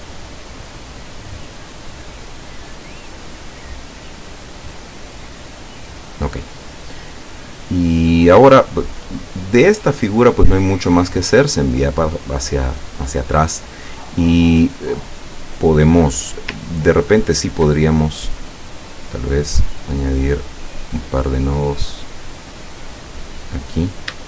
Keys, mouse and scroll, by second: 8.9 click, 10.9 click, 16.8-17.4 ctrl+scroll up 4, 18.8 click, 19.5 click, 20.4 click, 23.0 click.